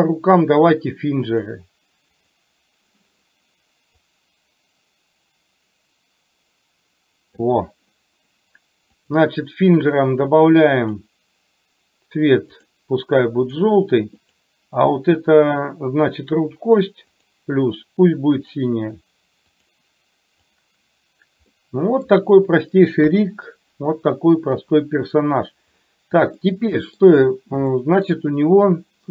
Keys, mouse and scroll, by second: 2.3 click, 4.0-7.4 drag, 10.9-12.8 drag, 13.5 click, 17.2 click, 18.4-19.8 drag, 20.4 click, 21.5 middle click, 23.2 KP_3, 26.5 shift+middle click, 27.8 shift+middle click.